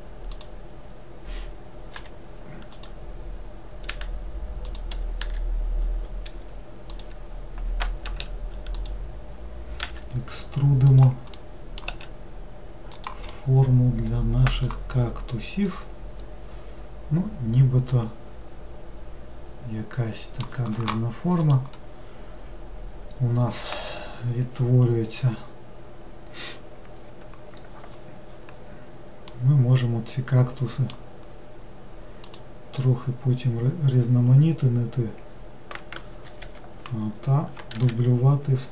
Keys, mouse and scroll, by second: 2.0 g, 5.3 r, 8.1 s, 11.4 middle click, 11.9 s, 13.4-15.0 middle drag, 15.0-15.7 scroll down 1, 15.7-18.7 middle drag, 29.4-32.3 middle drag, 32.3 click, 37.8 shift+d.